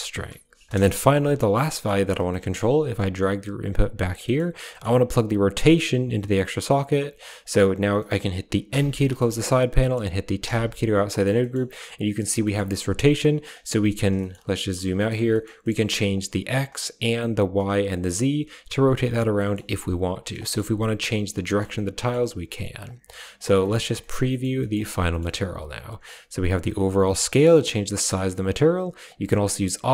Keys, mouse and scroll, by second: 0.3 click, 1.5 middle click, 1.6 scroll up 1, 1.9 click, 2.2 middle click, 2.2 scroll up 1, 2.7 g, 4.1 middle click, 4.5 middle drag, 5.5-6.3 drag, 6.5 click, 7.0 click, 7.8 middle click, 7.9 click, 8.5 n, 8.9 drag, 9.2 click, 9.6 click, 10.3 Tab, 10.9 middle click, 11.2 middle click, 11.8 click, 12.3 middle click, 12.9 click, 14.0 shift+middle click, 14.5 shift+middle click, 14.9 shift+middle click, 15.1 middle click, 15.4 middle click, 15.9 click, 16.8 click, 17.7-18.9 drag, 19.2 middle click, 19.6 a, 19.9 click, 21.3 middle click, 21.9 shift+middle click, 22.7 click, 23.5 shift+middle click, 23.8 middle click, 24.1 middle click, 24.4 middle click, 24.9 middle click, 25.9-27.9 drag, 28.2 drag, 28.9 click, 29.7-29.9 drag.